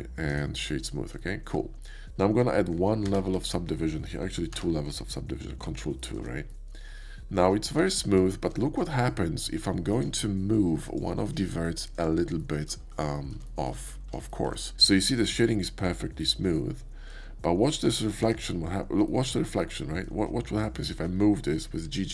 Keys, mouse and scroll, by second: 0.3 right click, 0.8 click, 1.2 click, 4.5 ctrl+2, 5.1-5.6 drag, 5.9 shift+drag, 6.5 shift+middle click, 6.9 Tab, 7.3 middle click, 8.3 middle click, 8.5 middle click, 9.9 shift+click, 10.7 shift+click, 11.3 click, 11.9 click, 12.4 middle click, 13.1 shift+middle click, 13.4 shift+middle click, 14.3 shift+middle click, 14.7-17.0 shift+middle drag, 18.2 Tab, 19.0 middle click, 20.5 click.